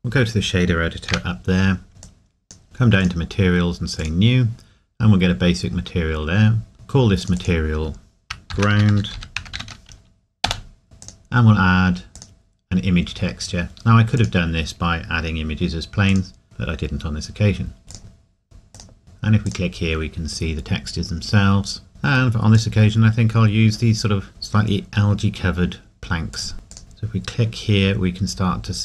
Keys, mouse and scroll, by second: 2.0 click, 5.3-6.7 scroll up 1, 17.9 click, 18.7 click, 22.5 click, 26.3 click, 26.7 click.